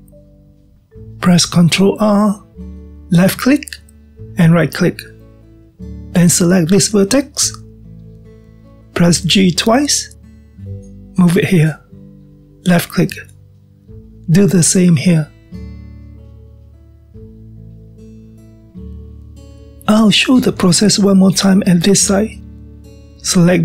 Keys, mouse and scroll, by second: 2.4 ctrl+r, 6.9 click, 14.8 drag, 15.5 g, 17.6-19.6 middle drag, 19.6-20.0 scroll down 1, 20.0-23.6 middle drag.